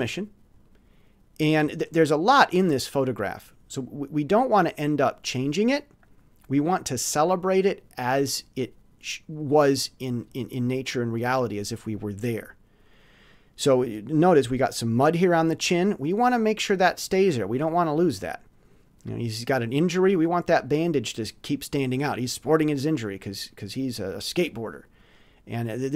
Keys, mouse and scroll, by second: 2.0 ctrl+scroll up 2, 6.0 click, 8.4-9.9 drag.